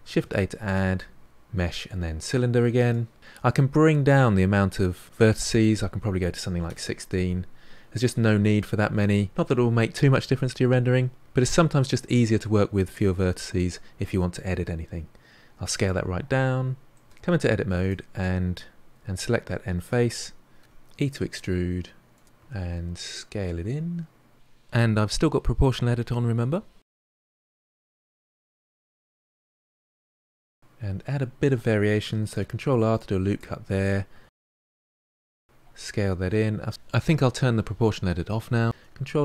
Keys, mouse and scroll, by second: 6.6-13.1 drag, 13.1 s, 15.7 scroll up 7, 16.1-17.0 middle drag, 17.0 Tab, 17.4 click, 18.0 middle click, 18.2 scroll down 1, 18.5-20.6 middle drag, 20.6 e, 26.7 s, 30.8-31.7 scroll up 2, 32.1 ctrl+r, 34.1 s, 38.2 click, 38.7 ctrl+r.